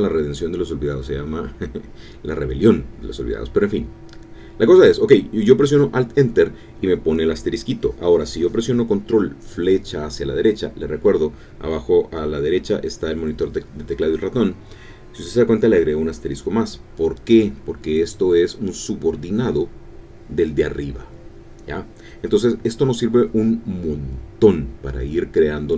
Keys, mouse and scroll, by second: 4.9 alt+Right, 16.0 Up, 17.0 Down, 22.6-24.4 typing.